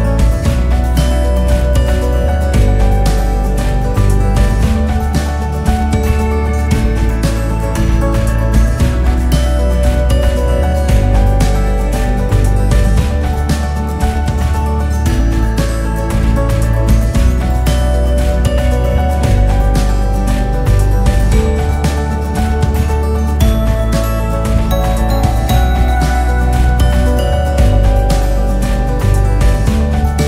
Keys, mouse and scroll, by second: 1.0 r, 2.0 e, 5.2-6.9 scroll up 5, 10.0 alt+click, 10.6-11.4 scroll down 1, 11.4 g, 16.1 alt+click, 16.9 alt+click, 18.2 g, 22.3 click, 23.5 alt+click, 24.3 alt+click, 25.5 g.